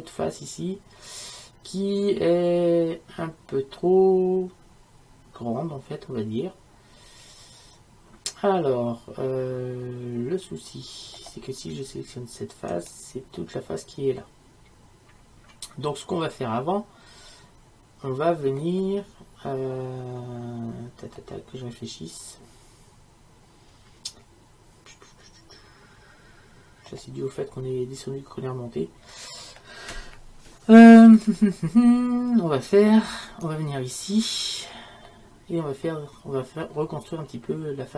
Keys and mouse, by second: 12.8-15.3 right drag, 15.3-21.5 middle drag, 21.5-22.7 right drag, 22.7-23.9 middle drag, 31.3-33.3 middle drag, 35.6-37.9 middle drag.